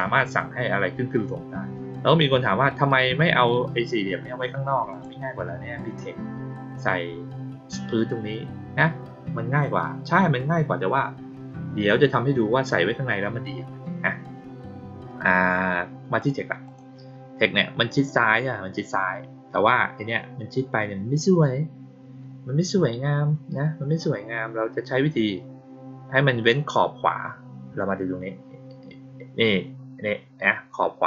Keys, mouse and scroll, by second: 4.8 click, 16.1 click, 16.6 click.